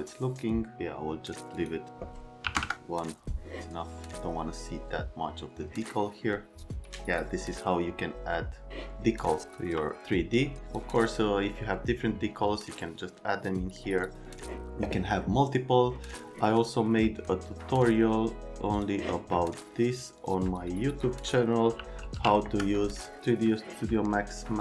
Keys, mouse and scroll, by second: 1.5 click, 2.4 KP_1, 2.5 KP_Enter, 8.7 click, 10.6 click, 11.0 click, 17.1 click, 18.7 click, 20.2 click, 20.6 click, 21.5-22.7 typing.